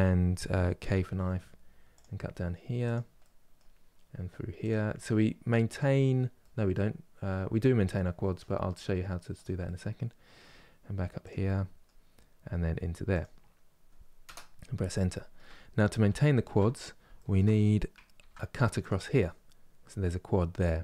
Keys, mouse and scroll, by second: 0.6 k, 2.9-15.3 middle drag, 15.3-15.8 scroll up 2, 15.8 shift+middle click, 16.3 scroll up 2, 16.9 shift+middle click, 17.8 ctrl+r, 20.5 middle click.